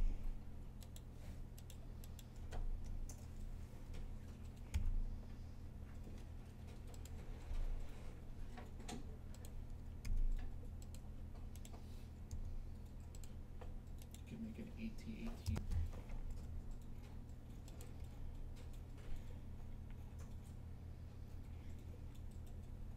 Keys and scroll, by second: 4.6 g, 7.3 r, 9.9 g, 16.1 r, 17.6-18.3 typing.